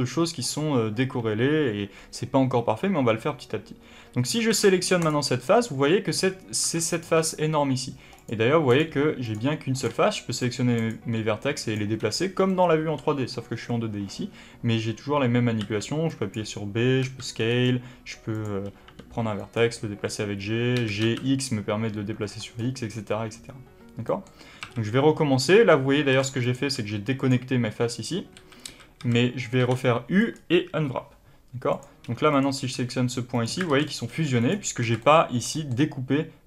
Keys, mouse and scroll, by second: 3.7 3, 4.4 alt+a, 4.9 click, 6.5 1, 6.8 click, 7.0 g, 8.6 click, 8.8 g, 9.7 click, 9.8 g, 10.7 click, 10.8 g, 11.6 click, 12.4-17.5 middle drag, 15.5 b, 17.5 right click, 18.2 click, 18.8 g, 19.4 click, 20.7 g, 22.5 right click, 23.9-26.3 middle drag, 24.5 a, 26.3 click, 26.7 g, 27.2 click, 28.2 a, 31.6 click, 32.2 click, 32.7 g, 33.6 alt+a, 33.8 click, 34.0 g, 34.4 click, 34.7 alt+a, 34.9-36.4 middle drag, 35.7-36.4 scroll up 2.